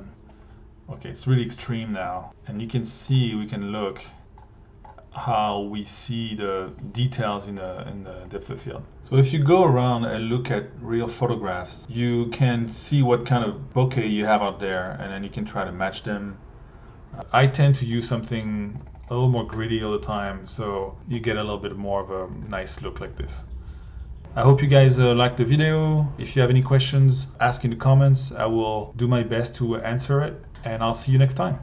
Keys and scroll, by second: 0.1 1, 2.0 1, 18.0 1, 20.9 1.